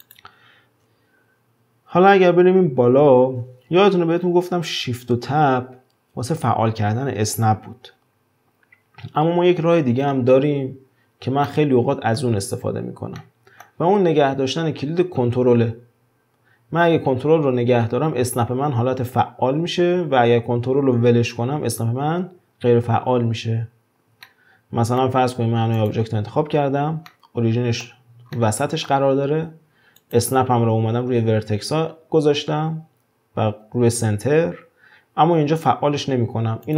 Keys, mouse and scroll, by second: 0.0 drag, 11.5-16.2 middle drag, 23.7-24.2 scroll up 2, 24.2-25.4 shift+middle drag, 25.4 scroll up 2, 25.8 click, 27.1-30.0 shift+middle drag, 30.0-33.0 drag, 36.6 click.